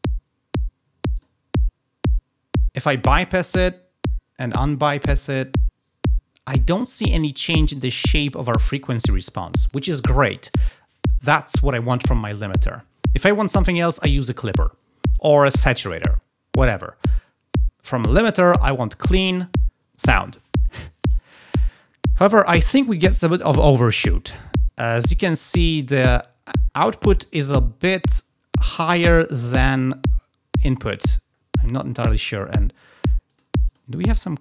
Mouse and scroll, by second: 1.0 click, 3.2 click, 4.9 click, 33.2 click, 33.6 click.